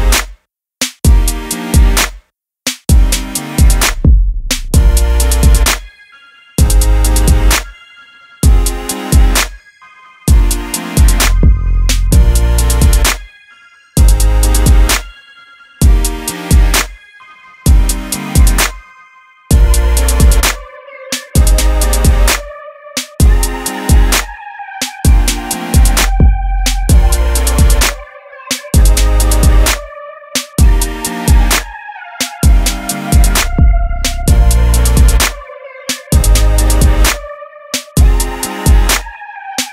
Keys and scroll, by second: 7.4 Return, 27.9 super+t, 31.4 Return, 35.2 super+t.